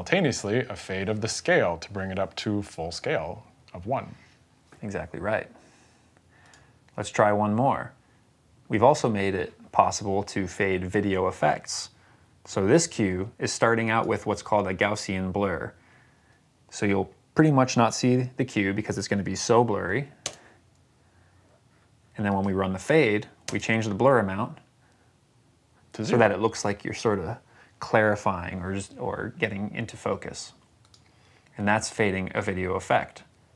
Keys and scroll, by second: 20.1 space, 23.3 space.